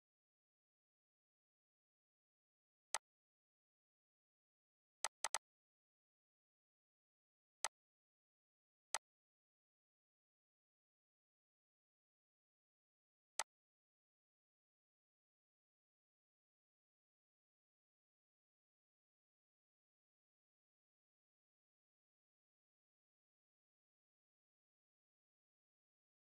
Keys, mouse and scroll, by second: 2.9 click, 7.6 click, 13.4-23.4 drag.